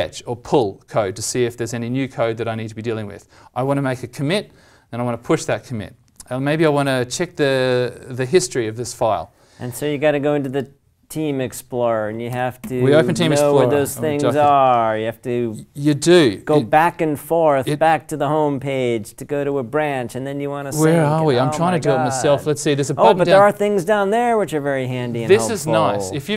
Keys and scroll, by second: 12.3 ctrl+\, 12.6 ctrl+m, 13.9 ctrl+Insert.